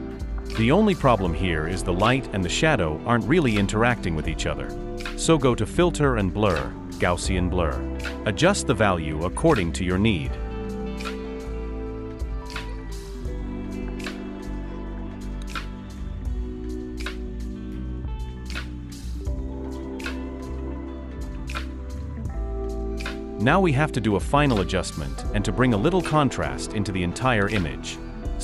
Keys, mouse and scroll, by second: 0.4-0.7 alt+scroll up 1, 25.0 alt+scroll down 1, 27.3 alt+scroll, 27.4-28.4 scroll up 1.